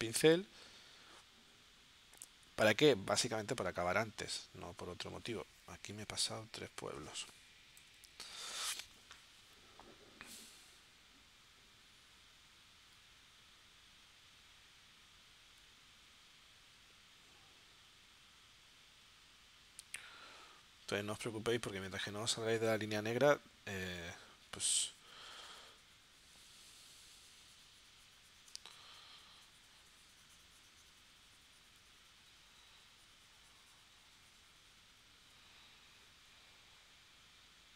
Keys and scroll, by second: 6.1 super+z, 7.8 9.